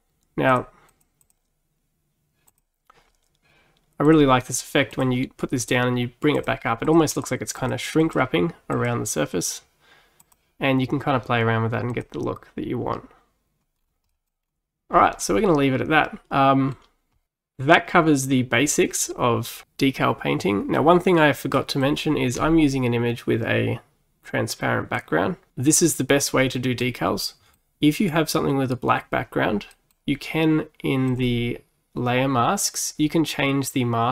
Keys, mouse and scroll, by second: 0.3 scroll up 1, 0.5-4.2 drag, 5.0-13.8 drag, 13.8-14.1 scroll down 4, 14.1 middle click, 14.5-15.3 scroll down 1, 15.3-17.3 middle drag, 20.8-22.4 middle drag, 22.4-23.6 scroll down 4, 23.6-25.5 scroll down 1, 26.6-31.1 middle drag, 31.1 click, 33.0-34.1 drag.